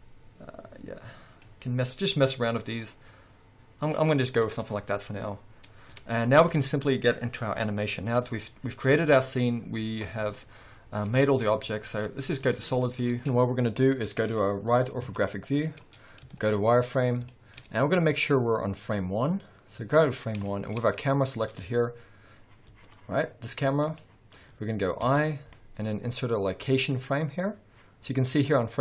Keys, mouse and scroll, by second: 4.3-4.8 scroll down 1, 8.4 z, 12.6-13.1 scroll down 2, 13.1-15.8 middle drag, 14.7 KP_5, 15.0 KP_3, 16.2 z, 17.2-17.7 shift+scroll up 2, 17.3 shift+middle click, 18.3-20.4 drag, 20.2 scroll up 1, 20.4-24.0 shift+middle drag, 20.8-22.7 scroll up 2, 22.7 g, 24.0 right click, 25.0 i, 28.4-28.8 drag.